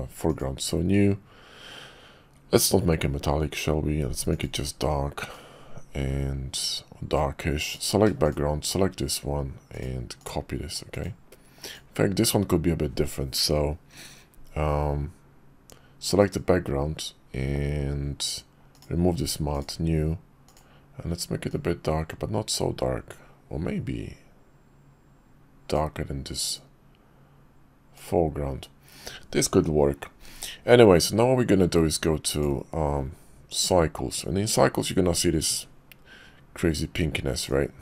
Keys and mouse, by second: 4.4 click, 7.6 click, 8.2 shift+click, 9.7 click, 10.9 click, 11.6 click, 16.2 click, 20.5 click, 26.6-27.9 drag, 37.5 click.